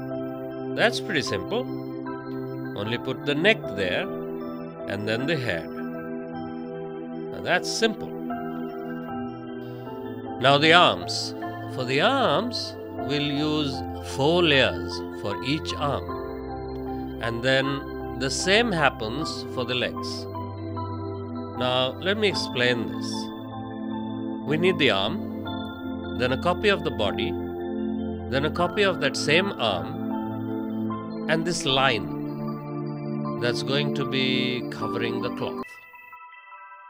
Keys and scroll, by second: 17.0 ctrl+z.